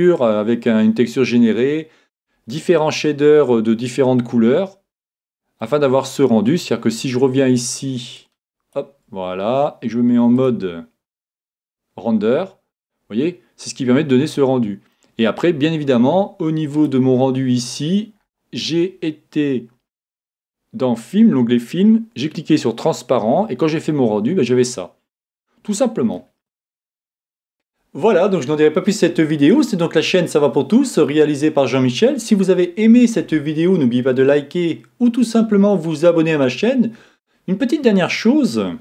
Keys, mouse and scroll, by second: 5.7-7.5 middle drag, 8.2-9.9 drag, 10.4-12.2 drag, 12.9-16.4 middle drag, 17.6-18.7 drag, 18.2 middle click, 18.7-23.4 middle drag, 26.2-27.5 middle drag.